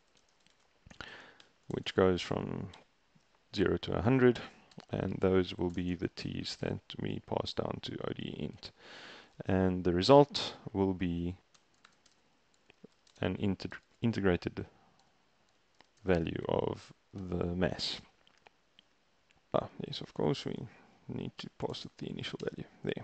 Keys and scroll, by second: 0.0-3.3 typing, 4.8 Down, 5.2 Right, 5.5-7.7 typing, 8.6 Right, 8.9 ctrl+a, 11.3-16.6 typing, 17.2 shift+Return, 20.6-22.0 typing, 22.5 shift+Return.